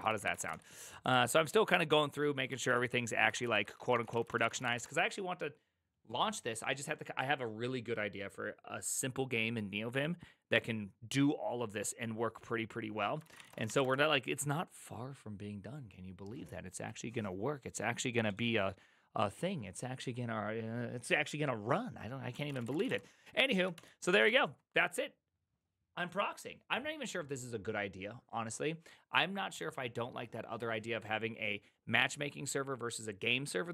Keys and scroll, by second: 0.0-0.8 typing, 0.9 ctrl+u, 3.3-5.2 typing, 13.1-14.2 typing, 22.2-24.2 typing, 23.7 ctrl+h, 24.0 ctrl+c.